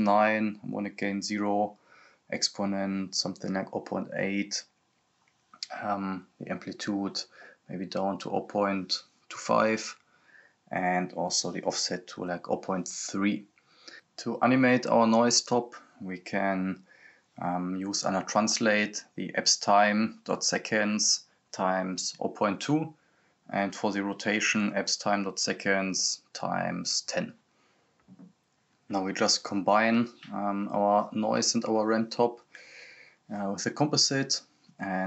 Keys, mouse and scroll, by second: 13.2-15.6 typing, 16.7 Return, 17.8 click, 18.5 ctrl+c, 19.0 click, 19.4 ctrl+v, 19.6 click, 19.9 ctrl+v, 20.2 click, 21.3 ctrl+v, 22.0-24.4 drag, 24.4 click, 25.2 ctrl+c, 25.7 click, 26.1 ctrl+v, 26.5 click, 27.0 ctrl+v, 27.5 click, 28.4 right click, 28.7-29.6 typing, 30.0 click, 32.9-33.3 scroll up 1, 33.9 click.